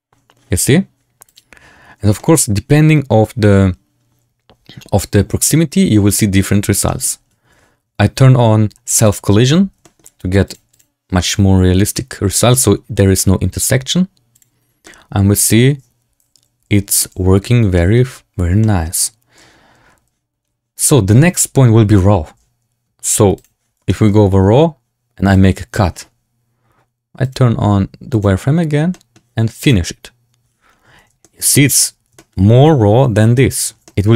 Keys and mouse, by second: 1.3 click, 2.1 shift+middle drag, 6.8 shift+drag, 9.0 click, 9.7 shift+drag, 10.4 click, 10.6 click, 14.7-16.9 drag, 17.7 shift+drag, 18.5 shift+drag, 21.3-21.9 drag, 23.3 click, 23.8 shift+click, 25.2 click, 27.2-28.7 drag, 28.8 click, 29.5 click, 31.1 shift+middle drag, 32.1 shift+middle drag, 33.8 middle drag.